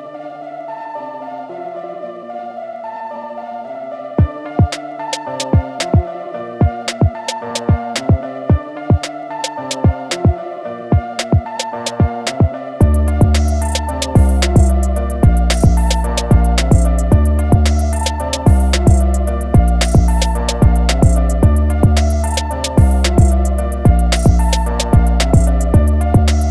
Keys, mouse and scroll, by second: 0.2 scroll down 1, 0.6-1.0 alt+scroll up 2, 1.0-2.4 scroll down 1, 2.4 click, 5.7 Escape, 8.1 click, 12.4 Escape, 14.2 alt+scroll up 1, 14.9-15.7 scroll up 1, 15.9-17.0 alt+scroll up 2, 17.0 click, 20.5 Escape, 21.1 click, 23.8 Escape, 24.8 click.